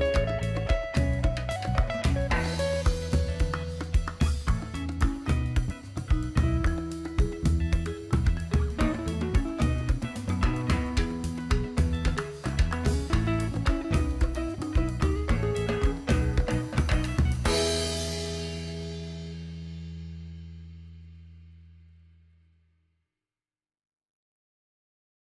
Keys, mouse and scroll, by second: 0.2 click, 0.7 alt+scroll down 1, 0.9 click, 2.1 click, 5.0 click, 6.2 right click, 6.7-9.8 drag, 12.2-16.0 drag, 16.6 alt+scroll up 1.